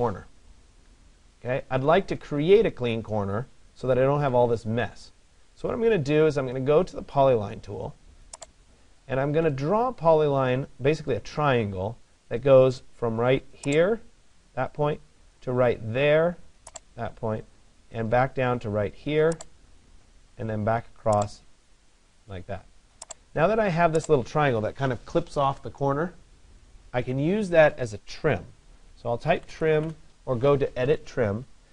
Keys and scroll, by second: 29.5 Return.